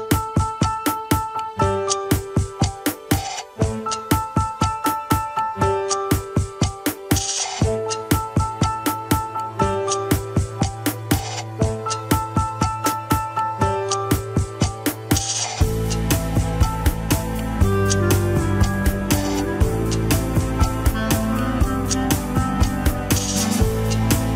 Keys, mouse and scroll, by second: 0.1-2.6 middle drag, 3.3 KP_1, 3.7 scroll down 2, 4.3 ctrl+s, 4.8 click, 5.2 scroll up 1, 6.1 shift+click, 7.2 ctrl+Tab, 8.2 ctrl+Tab, 9.0 alt+z, 9.8 ctrl+click, 9.8 alt+z, 10.0-10.4 scroll down 1, 10.4 scroll up 1, 10.7 Tab, 11.0-12.0 middle drag, 12.0 KP_1, 12.2-12.6 scroll up 4, 12.9 click, 13.1 click, 13.7 click, 13.9 click, 14.8 click, 15.0 click, 15.7 alt+z, 16.1 shift+middle click, 16.5 alt+z, 17.3 shift+click, 17.6 shift+click, 18.2-18.8 scroll down 1, 18.8 h, 19.5 click, 20.1 l, 21.0 l, 22.0 click, 22.6 Tab, 22.7-24.3 middle drag.